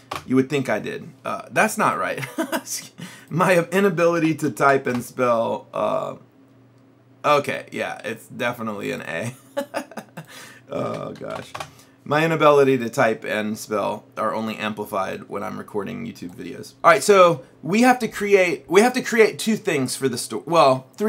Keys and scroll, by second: 4.2 BackSpace, 4.6 shift+o, 5.0 Return, 10.9 BackSpace, 11.4 shift+a, 11.6 Return.